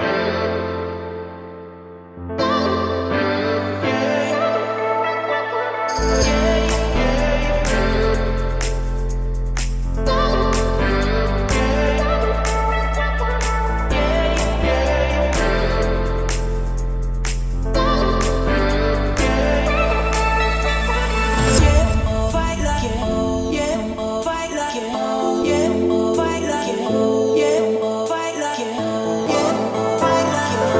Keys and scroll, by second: 3.0 Escape, 7.8 0, 7.9 Return, 13.3 Escape, 17.3 o, 18.9 Escape, 19.7 Escape, 21.7 Escape, 24.5 Escape, 25.2 Escape, 25.9 Escape, 30.1 Escape.